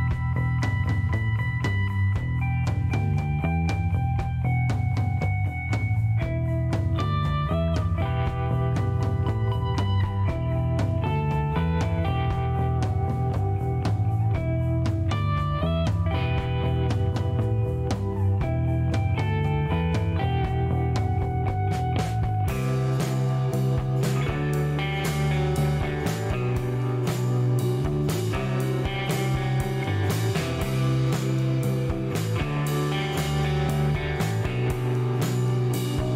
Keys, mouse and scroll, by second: 1.0 click, 3.3 click, 3.8 middle click, 4.1 scroll down 1, 4.7 click, 5.3 click, 7.1 click, 7.7-8.8 typing, 9.9-11.3 drag, 11.4 middle click, 13.3 click, 16.3 click, 18.1 click, 18.9 right click, 19.7 click, 20.9 click, 21.6 5, 21.8 Return, 23.4-25.0 drag, 26.2 click, 27.8 click, 29.0 click, 30.9-31.9 typing, 32.5 middle click, 34.4 click.